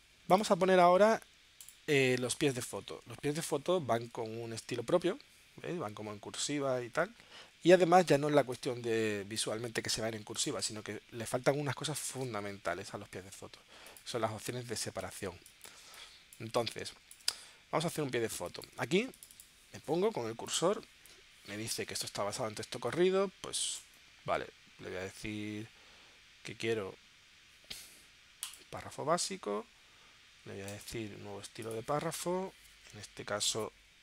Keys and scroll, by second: 4.1 super+Tab, 12.3 super+Tab, 14.2 space, 18.4 space.